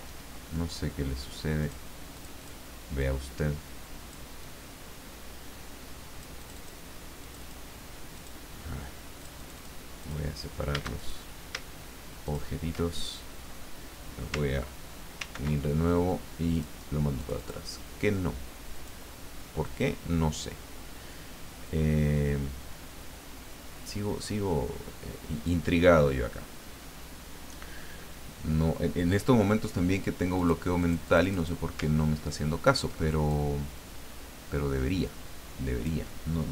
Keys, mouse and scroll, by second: 1.6 click, 2.1 click, 3.0-4.3 drag, 4.4-6.8 drag, 7.2 click, 8.1 click, 9.2 click, 10.0 click, 11.0 shift+click, 12.2 shift+click, 15.1 ctrl+g, 16.6 click, 17.2-18.2 drag, 18.8 click, 19.6-25.6 drag, 30.3 click, 30.8-31.8 drag, 32.0-33.3 ctrl+scroll up 2, 33.3-36.3 ctrl+drag.